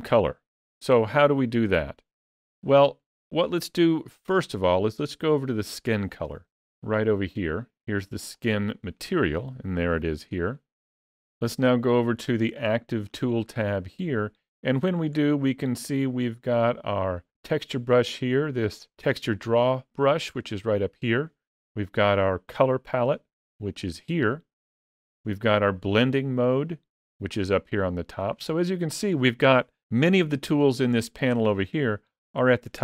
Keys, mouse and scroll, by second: 1.1-1.6 scroll down 2, 1.6 shift+middle click, 2.8 shift+middle click, 8.2 click, 12.4 click, 14.9-15.4 scroll down 1, 15.4-17.6 scroll down 4.